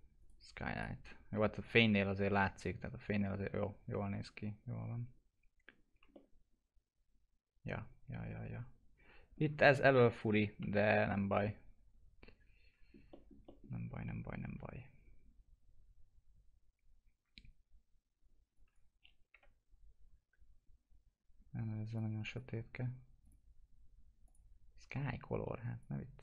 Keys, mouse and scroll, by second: 0.1 right click, 0.7 click, 6.1-9.6 alt+middle drag, 9.9 F4, 10.5-11.1 scroll down 1, 11.3 alt+middle click, 18.5 click, 19.3 Delete, 21.9-23.2 drag.